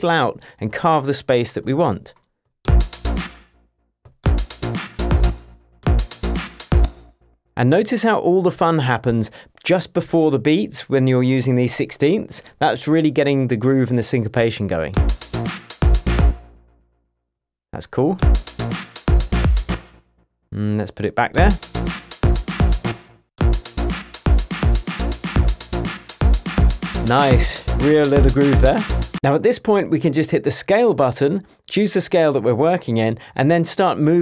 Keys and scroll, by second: 0.7 BackSpace, 1.6 p, 2.4 BackSpace, 2.6 space, 4.0 BackSpace, 4.2 space, 5.6 BackSpace, 5.8 space, 6.8 space, 7.2 BackSpace, 14.9 space, 16.2 space, 18.2 space, 19.7 space, 21.2 BackSpace, 21.3 space, 22.9 space, 23.2 BackSpace, 23.4 space.